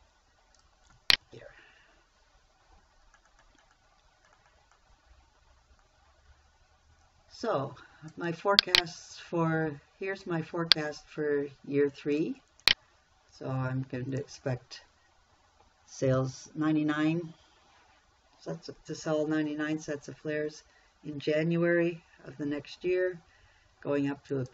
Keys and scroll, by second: 1.7 ctrl+v.